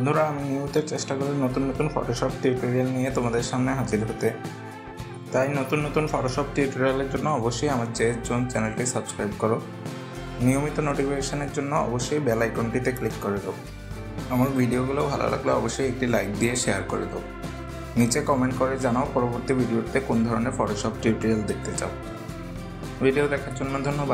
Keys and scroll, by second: 4.0 ctrl+j, 17.9 ctrl+=, 23.7 ctrl+0.